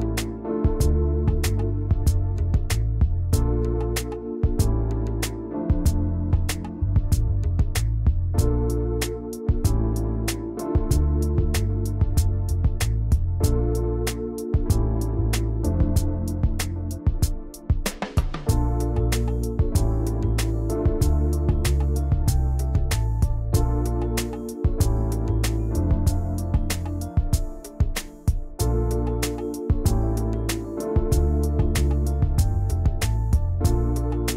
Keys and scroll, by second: 24.5 ctrl+[, 27.9 ctrl+shift+[, 28.1 ctrl+].